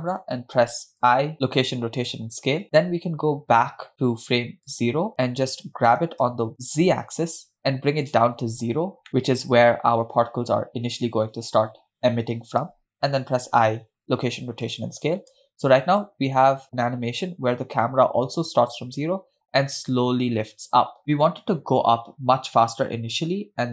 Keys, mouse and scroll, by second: 0.0-0.5 drag, 1.3 i, 5.1 click, 5.9 g, 8.6-8.9 scroll up 2, 9.1 middle click, 9.9-10.4 scroll down 1, 13.3 i, 15.8 space.